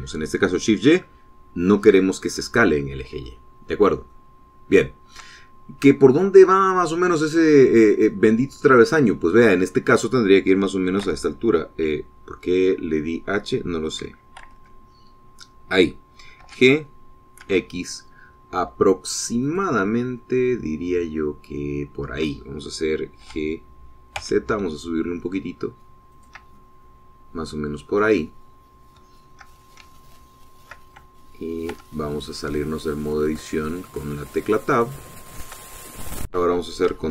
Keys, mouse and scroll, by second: 4.1 middle click, 4.9-6.1 shift+middle drag, 6.5-9.5 drag, 11.9 h, 15.2 alt+h, 17.2 g, 18.2 x, 20.3 click, 20.8-24.1 shift+middle drag, 24.1 g, 25.0 z, 26.9 shift+click, 27.4-30.0 shift+middle drag, 30.4 shift+scroll up 2, 30.8 shift+middle click, 32.6 Tab, 33.3 shift+click, 34.0-36.5 shift+drag, 36.6 shift+scroll up 1, 36.9-37.1 middle drag.